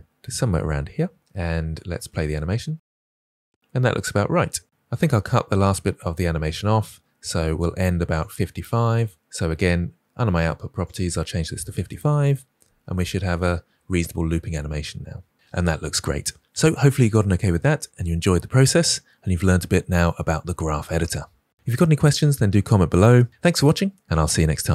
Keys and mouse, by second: 2.0 space, 4.5 space, 7.5 click, 10.8-12.0 drag, 11.8 5, 13.3 space, 17.8 space.